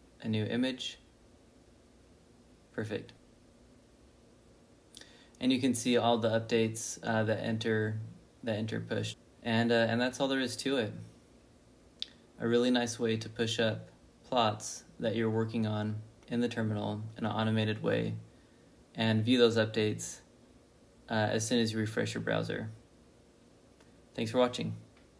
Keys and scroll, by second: 2.5 b, 2.7 n, 6.3 ctrl+b, 6.5 n, 9.0 -.